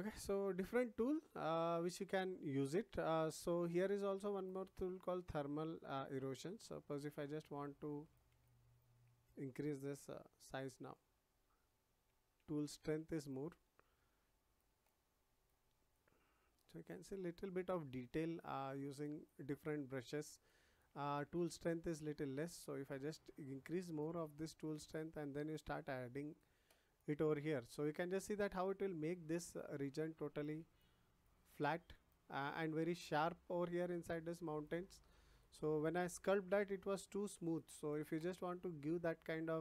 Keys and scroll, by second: 10.1 ].